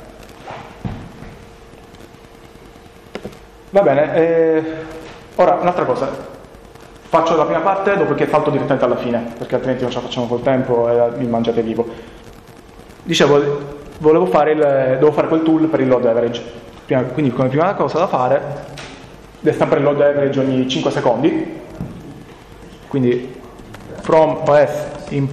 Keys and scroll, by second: 11.5 Up, 11.7 Up, 11.9 Up, 14.7 BackSpace, 23.4-24.8 typing.